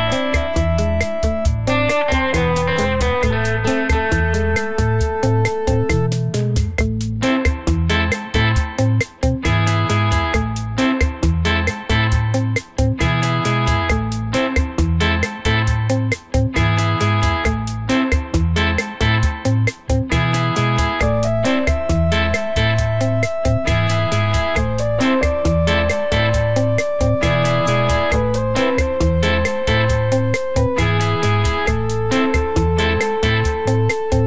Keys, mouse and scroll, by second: 0.7 click, 2.0 right click, 2.9 middle click, 4.0 click, 5.5 middle click, 7.1 middle click, 7.8 click, 8.4 click, 9.4 middle click, 10.5 click, 11.6 click, 12.0 click, 13.5 middle click, 15.0 click, 16.7 click, 17.7 click, 19.9 click, 21.5 middle click, 22.1 middle click, 24.8 g, 26.9 middle click, 28.8 ctrl+z, 29.2 g, 31.1 shift+a, 32.1 s.